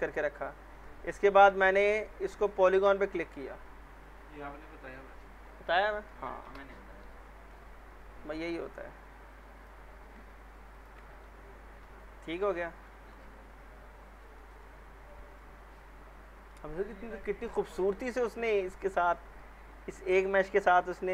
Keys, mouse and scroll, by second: 2.6 ctrl+click, 6.4 Delete, 7.0-7.6 middle drag, 8.6 click, 10.7 ctrl+click, 11.8 Delete, 12.6 scroll down 1, 12.9 alt+middle click, 13.4-14.1 scroll down 2, 14.1 scroll down 1, 14.4 middle click, 14.8 scroll up 1, 15.7-16.6 alt+middle click, 16.6-17.0 scroll down 2, 17.1-17.8 alt+middle drag.